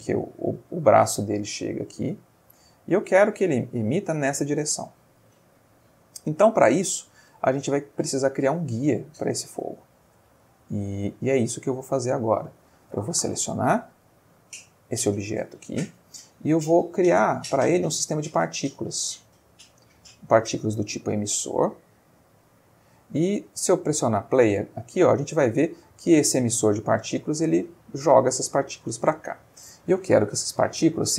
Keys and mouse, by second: 6.7-7.5 middle drag, 7.7-8.2 ctrl+middle drag, 8.9 click, 9.7-10.4 ctrl+middle drag, 10.7 shift+middle click, 11.2 ctrl+shift+middle click, 12.0 click, 13.1-13.5 ctrl+middle drag, 14.0-15.6 middle drag, 17.5 click, 18.7 click, 21.9-23.0 ctrl+middle drag, 23.6 space, 29.1 Escape, 30.4-31.1 drag.